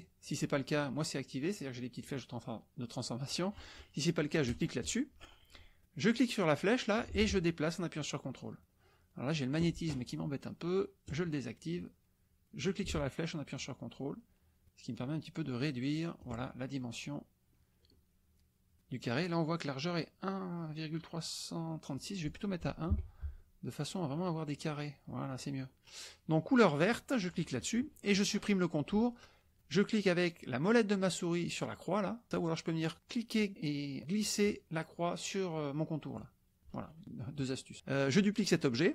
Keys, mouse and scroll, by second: 4.4 click, 6.7-9.7 drag, 11.0 click, 12.8-16.4 drag, 21.9 click, 22.9 KP_1, 24.5 click, 27.3 click, 33.0-36.3 drag.